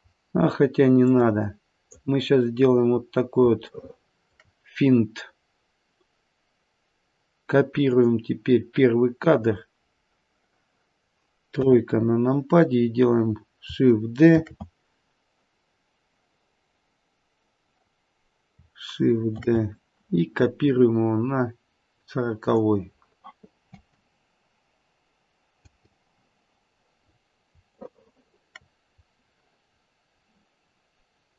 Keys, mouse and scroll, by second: 1.1 click, 2.2-2.9 scroll down 5, 2.9-3.6 scroll down 5, 3.6 scroll down 1, 3.7 shift+middle click, 5.2-6.0 scroll down 1, 6.0-6.8 scroll down 1, 7.9 click, 9.1 click, 11.5 KP_3, 14.2 shift+d, 19.4 shift+d, 23.7 space, 25.6 space, 27.0-27.5 scroll up 1, 27.8 shift+middle click, 27.8-28.3 scroll up 5, 29.6-30.2 scroll down 6.